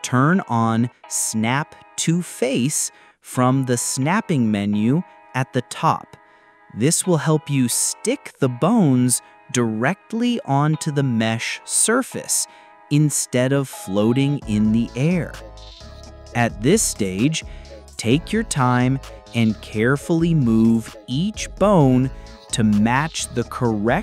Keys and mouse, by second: 0.5 click, 2.3 g, 6.6-7.1 drag, 7.7 g, 10.9 click, 11.4-11.9 drag, 12.6 g, 15.5 click, 16.1 g, 16.6 click, 17.3-19.7 typing, 17.4 click, 17.9 ctrl+z, 17.9 click, 19.5 ctrl+f, 19.6 ctrl+z, 19.8 click, 20.0 ctrl+click, 20.6 click, 20.9 click, 21.0 g, 21.3 click, 21.4 g, 22.3 g, 22.9 click, 23.0 g.